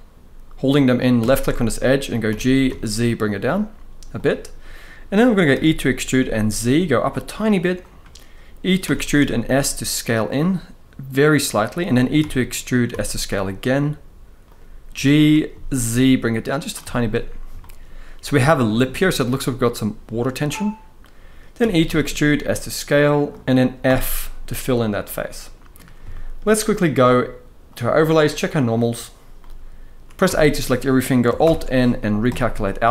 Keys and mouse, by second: 2.0 g, 2.4 z, 4.6 middle click, 5.3 e, 5.9 z, 7.5 click, 8.5 e, 8.9 s, 11.2 click, 11.9 e, 12.6 s, 14.1 click, 14.6 g, 15.2 z, 16.3 click, 16.6 shift+middle click, 17.3 shift+middle click, 21.3 e, 21.6 s, 23.0 click, 23.6 f, 24.5 middle click, 25.8 shift+middle drag, 27.4-28.8 drag, 29.1-29.8 middle drag, 30.0 a, 31.2 alt+n.